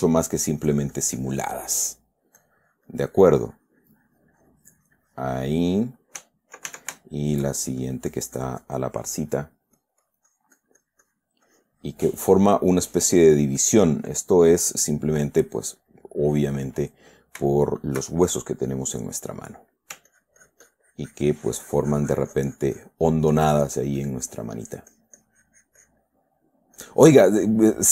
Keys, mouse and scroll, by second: 0.1 middle click, 0.8-2.1 drag, 2.2 middle click, 2.2 click, 2.8-6.1 drag, 6.6 Caps_Lock, 7.4 shift+middle click, 8.2-9.3 shift+drag, 9.7-11.8 drag, 11.8-13.0 drag, 13.2-14.3 drag, 15.5 click, 16.3 middle click, 17.0 middle click, 17.9 shift+click, 19.8 click, 20.5-26.5 ctrl+drag, 26.6 ctrl+middle click, 27.2 click, 27.6 middle click.